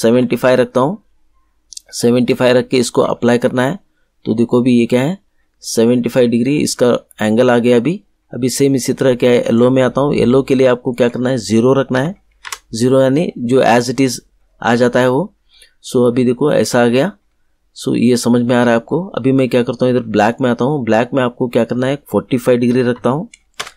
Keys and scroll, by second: 0.0 5, 11.9 0, 12.4 Return, 22.6 4, 22.9 5, 23.5 Return.